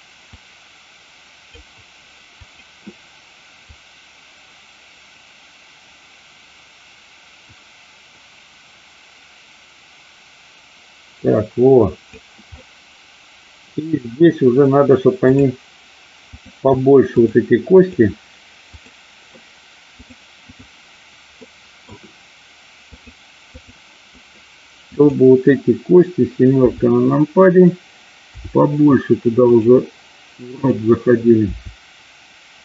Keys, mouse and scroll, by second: 0.4-1.5 drag, 2.4 click, 3.6-12.1 drag, 12.5-14.1 middle drag, 15.2 click, 17.7 click, 20.0 click, 21.5 middle click, 22.9 click, 24.9 click, 26.6 KP_7, 28.2 r, 30.4 click.